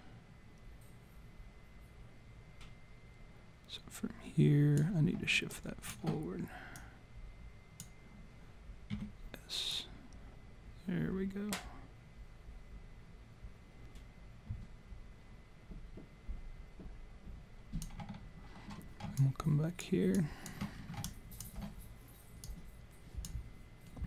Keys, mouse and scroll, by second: 5.5 alt+click, 6.8 click, 8.9 s, 9.7 click, 19.2 alt+click, 20.1 alt+click, 20.7-21.7 scroll down 3, 21.0 alt+click, 22.5 click.